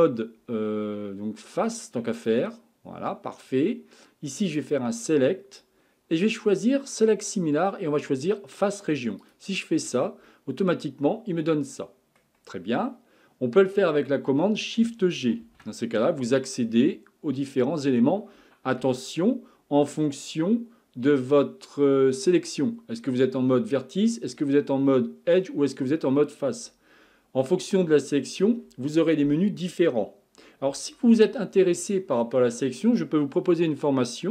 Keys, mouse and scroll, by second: 2.2-7.6 drag, 10.3-13.5 middle drag, 15.4 shift+g.